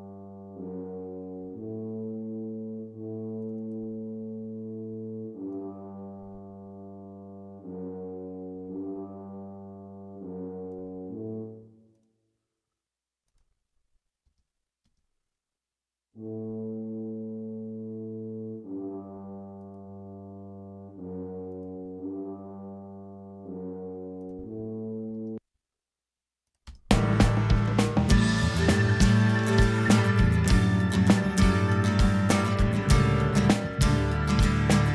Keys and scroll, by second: 14.2 space, 25.1 space, 26.6 space.